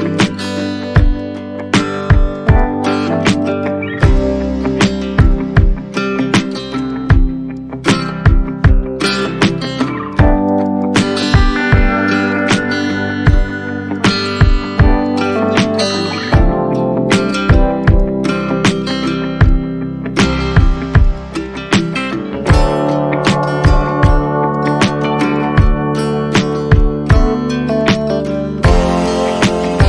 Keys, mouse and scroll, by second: 0.1 alt+click, 0.3-0.7 scroll up 2, 0.4 alt+middle click, 1.1 alt+click, 1.5 alt+click, 1.7 alt+middle click, 2.0 shift+click, 2.3 shift+click, 2.5 alt+click, 4.6 ctrl+click, 5.2 shift+click, 6.3 shift+click, 7.5 shift+click, 7.7 alt+middle click, 8.5 ctrl+z, 9.8 ctrl+click, 10.5 shift+click, 10.6 shift+click, 12.4 shift+click, 13.3 shift+click, 14.5 shift+click, 15.4 shift+click, 15.6 shift+click, 15.8 scroll down 1, 15.9 shift+click, 17.4 alt+click, 17.6 ctrl+z, 17.8 alt+click, 18.8 alt+click, 19.3 scroll down 1, 20.0 alt+middle click, 20.0 click, 21.0 alt+click, 21.4 alt+click, 22.3 alt+middle click, 22.9 alt+click, 23.3-23.7 alt+scroll up 2, 24.9 alt+click, 26.1 alt+click, 27.2 alt+click, 28.3 alt+click, 29.7 alt+click.